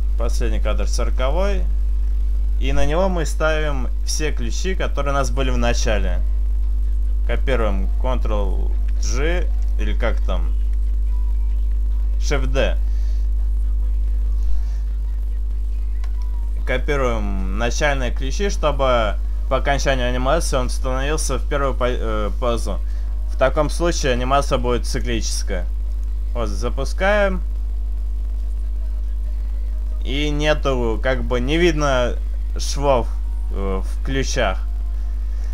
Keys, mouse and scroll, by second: 11.4 shift+d, 24.4 click, 26.1 click, 35.3 click.